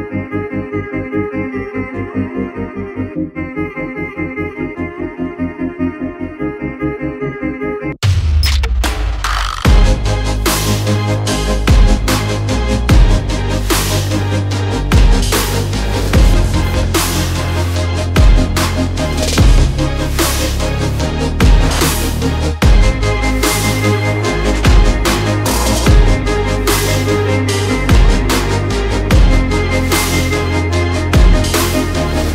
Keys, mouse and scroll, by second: 0.2 click, 0.7 right click, 2.2 click, 3.5 click, 4.2 click, 6.1 click, 7.3 click, 8.2 click, 8.6 click, 8.8 click, 9.1 click, 9.4 click, 9.6 click, 9.9 click, 10.1 click, 10.4 click, 10.8 click, 12.7 click, 13.7 click, 14.0 click, 14.9 click, 15.7 click, 16.5 click, 17.0-18.9 scroll, 19.0 click, 20.9 click, 21.2 click, 21.7 click, 22.2 click, 22.9 click, 23.3 click, 23.8 click, 24.9 click, 25.9 click, 26.4-27.3 scroll, 27.3 click, 28.0-28.5 typing, 29.0 click, 29.9 click, 29.9-30.4 scroll, 30.8 click, 31.2 click, 31.2-32.0 typing.